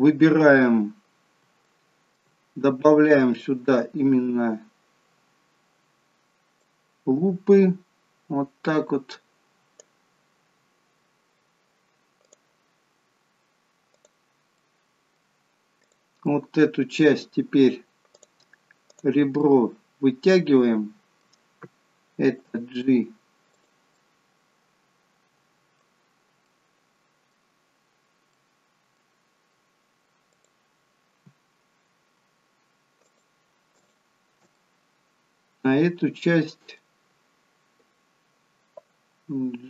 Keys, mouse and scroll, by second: 1.0 scroll up 2, 1.7 shift+middle click, 3.2 click, 6.5 click, 12.1 click, 13.9 click, 14.5 middle click, 15.7 click, 16.2 middle click, 18.0 click, 18.8 click, 19.3 middle click, 22.3 g, 23.8 middle click, 25.9-26.3 scroll up 2, 26.3 middle click, 27.5-28.3 scroll down 1, 28.3 middle click, 30.2 click, 32.9 alt+shift+click, 34.4 middle click, 39.2 g.